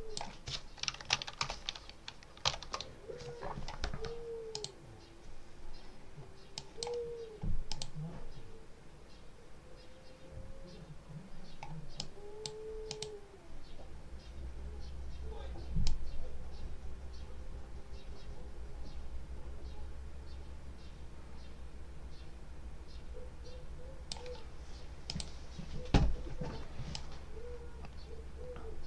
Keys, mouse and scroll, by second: 0.9 ctrl+a, 1.3 ctrl+0, 2.1-3.0 typing, 4.4 click, 6.4 click, 7.6 click, 11.8-12.5 drag, 12.8 click, 15.7-24.2 drag, 25.0 click, 26.8-28.8 drag.